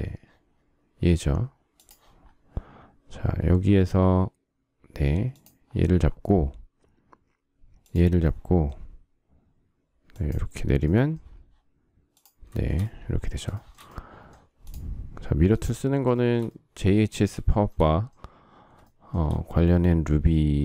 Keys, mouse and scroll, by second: 12.5 shift+double middle click, 13.4 shift+double middle click, 16.0 shift+middle click, 17.3 shift+middle click, 18.7 shift+middle click.